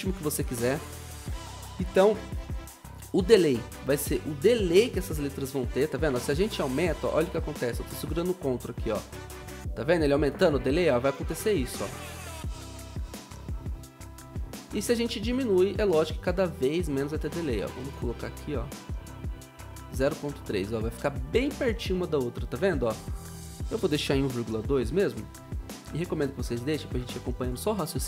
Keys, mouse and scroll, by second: 0.8 ctrl+z, 23.9-25.5 typing.